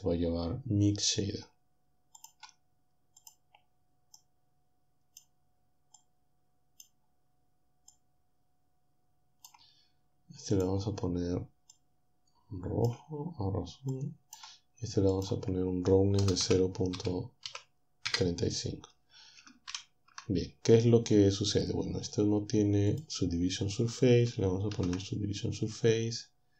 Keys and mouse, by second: 2.2 click, 3.2 click, 4.3-5.3 drag, 6.1 click, 8.1-10.3 drag, 10.5 click, 11.7-13.1 drag, 13.9 click, 15.1-16.2 drag, 16.2-17.5 typing, 18.1 Return, 19.7 ctrl+Down, 22.9 click, 24.7 ctrl+3.